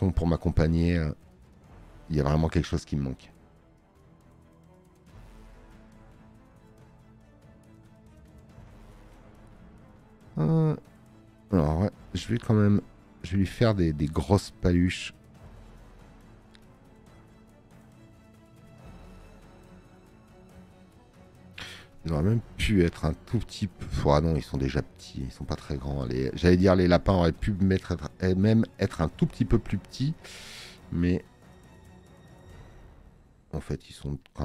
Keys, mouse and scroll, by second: 9.6 space, 9.8 click, 20.3 alt+scroll, 21.0 space, 21.2 click, 25.3 alt+scroll up 2, 26.0 space, 26.1 click.